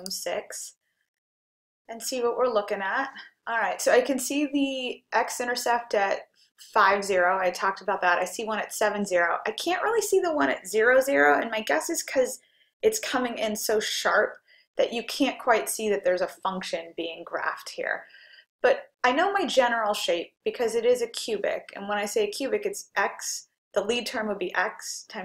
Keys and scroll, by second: 0.0 6.